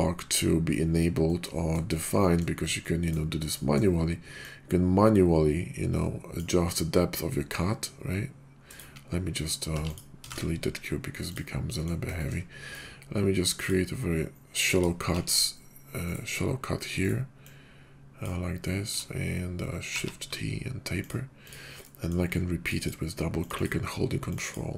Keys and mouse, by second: 1.2 drag, 1.8 shift+drag, 2.2 click, 2.8-3.1 drag, 3.5 middle drag, 4.3-7.1 drag, 8.9 drag, 9.7 x, 10.2 shift+a, 11.6 drag, 12.2 shift+click, 12.7-13.7 drag, 15.1 shift+t, 16.0 click, 17.0-18.3 drag, 19.9 shift+t, 21.0 click, 21.5-21.8 drag, 21.8 middle drag, 22.6 ctrl+click, 22.9 ctrl+click, 23.4 ctrl+click, 24.3 ctrl+click.